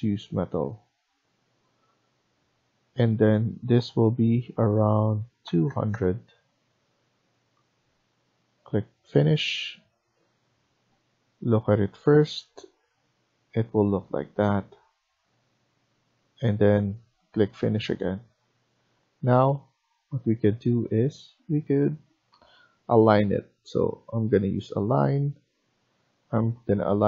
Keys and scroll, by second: 5.5 typing, 17.8 Escape, 18.2 Escape, 21.1 Escape, 22.2-23.1 typing.